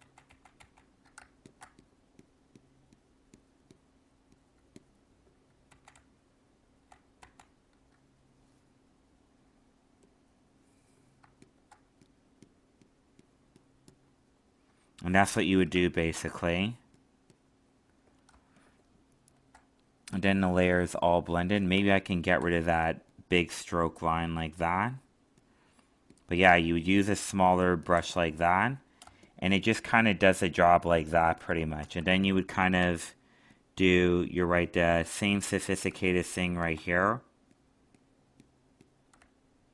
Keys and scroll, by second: 0.0 ctrl+z, 5.6 ctrl+z, 18.3 alt+space, 30.2 alt+space.